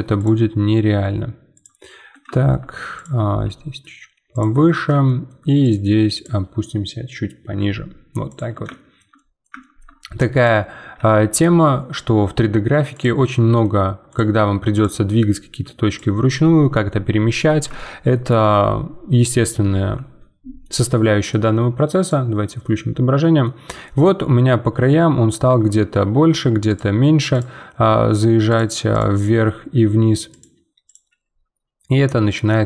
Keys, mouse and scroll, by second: 0.1 click, 0.5 g, 1.8-2.9 middle drag, 2.9 click, 3.4 g, 4.6 middle click, 5.6-7.5 drag, 7.5 g, 8.7-10.3 shift+middle drag, 10.3 click, 10.9 g, 13.2 middle click, 14.1-15.1 drag, 15.1 g, 16.3-17.4 middle drag, 17.4 scroll down 2, 17.7-19.6 shift+middle drag, 19.6 Tab, 20.5 scroll down 1, 20.6-22.0 middle drag, 22.0 click, 22.6 middle click, 23.5 scroll down 1, 23.8-25.4 middle drag, 25.4 Tab, 26.6-27.8 drag, 27.8 g, 28.9 click, 29.3 g, 30.8 click, 31.1 g.